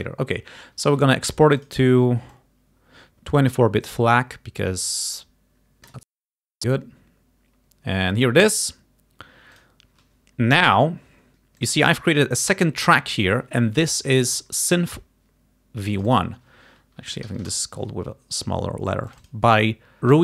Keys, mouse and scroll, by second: 1.7 click, 2.4-3.8 drag, 5.9 click, 9.7 click, 11.7-13.7 drag, 16.0 click, 17.1 Home, 17.2 Delete, 17.3 s, 17.7 Return, 19.1 click.